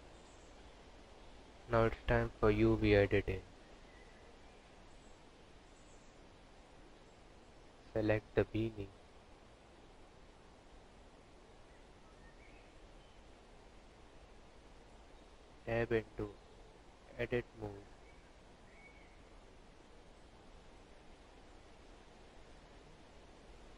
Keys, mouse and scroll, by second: 13.1 n, 14.1 click, 15.1 click, 21.1 Tab, 22.8 a.